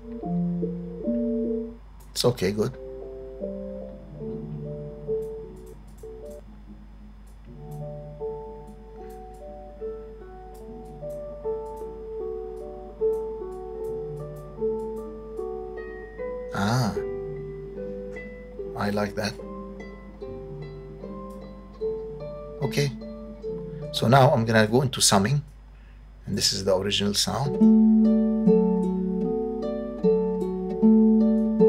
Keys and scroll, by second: 23.8 space, 27.2 space.